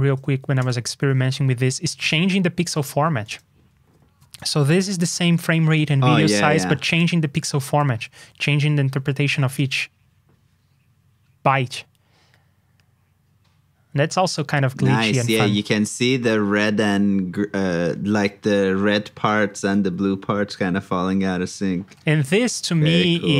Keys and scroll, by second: 0.0 alt+shift+Down, 0.4 ctrl+a, 4.3 super+c, 7.2 super+v.